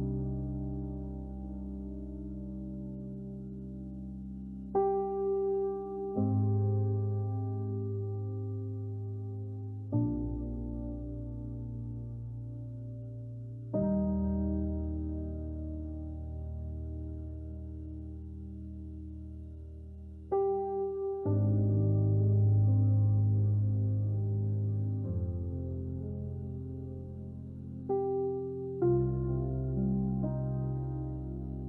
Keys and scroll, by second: 6.5 Return, 8.4 Delete, 10.5 j, 23.1 b, 27.8 Escape.